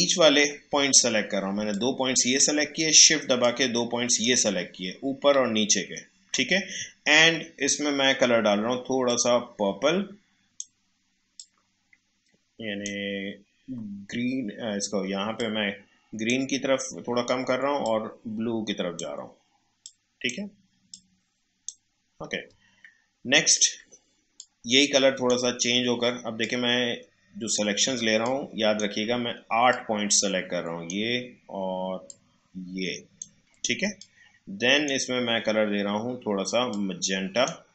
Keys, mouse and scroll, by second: 0.9 alt+scroll up 1, 1.7-3.4 drag, 3.4-8.5 shift+drag, 9.1-15.2 drag, 15.3-22.6 drag, 22.5 scroll up 2, 23.3 alt+scroll down 1, 24.3-28.0 drag, 28.0 space, 28.2 click, 28.5 space, 29.7-33.9 shift+drag, 33.8 space, 34.3 space, 36.7-37.7 drag.